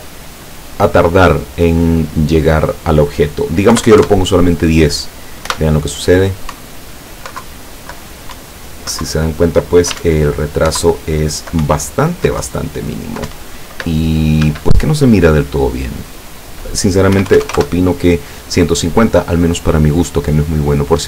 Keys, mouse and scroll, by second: 2.3 click, 3.8 KP_1, 3.9 KP_0, 4.0 KP_Enter, 5.5 p, 6.6 Up, 7.4 Down, 8.4 Up, 9.1 Down, 10.0 w, 10.1 Up, 10.8 Down, 11.7 Up, 12.5 Down, 13.4 Up, 14.5 Escape, 16.0 click, 17.2 KP_1, 17.3 KP_5, 17.5 KP_0, 17.6 KP_Enter.